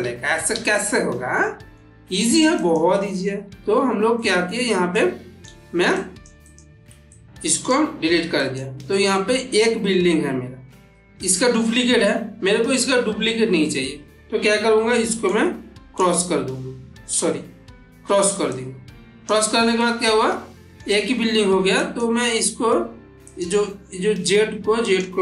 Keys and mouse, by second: 1.3-1.9 middle click, 2.4 click, 3.5 ctrl+x, 4.1 middle click, 5.1-5.4 click, 7.3 click, 8.2 click, 9.3 middle drag, 14.6 middle click, 15.2-16.0 shift+right drag, 18.4-19.3 click, 19.6-20.9 middle drag, 21.7 click, 23.1 click, 24.7 click.